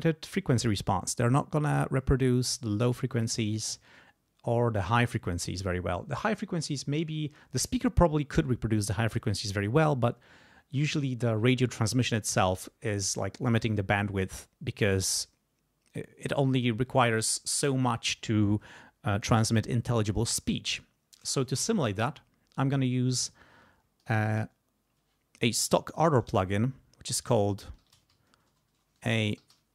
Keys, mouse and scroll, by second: 20.2 right click, 24.0 click, 26.0 a, 26.3 -, 27.5-29.7 typing.